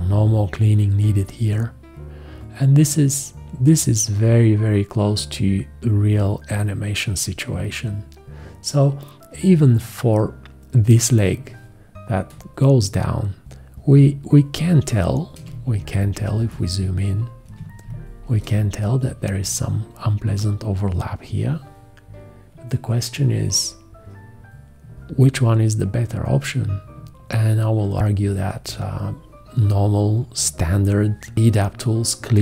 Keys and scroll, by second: 15.5 ctrl+space, 16.1 ctrl+space.